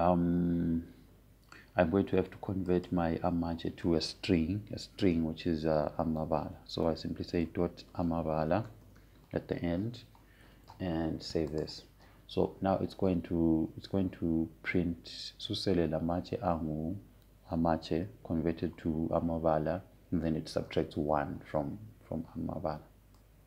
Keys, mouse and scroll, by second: 4.4 click, 9.1-11.4 typing, 13.2 click.